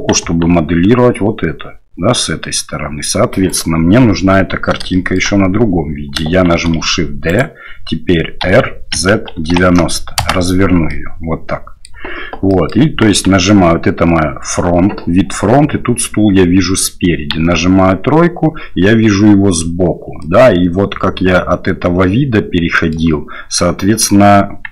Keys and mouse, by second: 0.2 KP_1, 3.5 right click, 4.9 shift+middle drag, 6.5 shift+d, 8.4 r, 10.9-11.9 middle drag, 12.5 middle click, 13.1 KP_1, 17.3 KP_3, 20.2-23.0 middle drag.